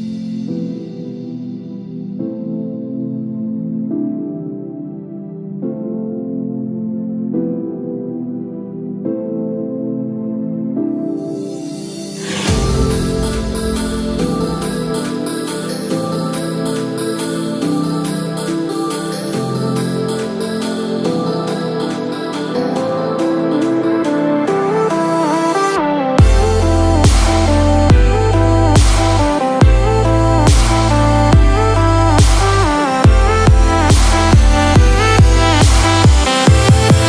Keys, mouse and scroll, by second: 17.0 shift+middle click, 17.0-17.6 scroll down 2, 20.3 middle click, 24.5 shift+middle click, 32.6 space.